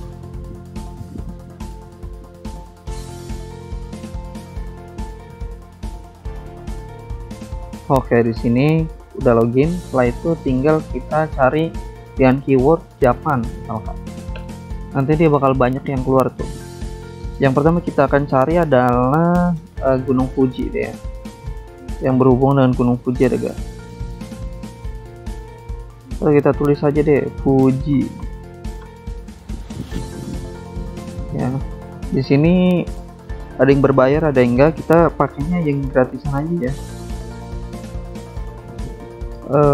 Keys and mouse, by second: 3.8 click, 5.8 click, 8.6 click, 18.5 click, 18.7 click, 19.8 click, 24.8 click, 26.1 typing, 26.4 Return, 28.9 alt+Tab, 29.7 click, 30.2 click, 31.9 click, 32.7 alt+Tab, 34.4 click, 38.7 click, 39.3-39.7 typing.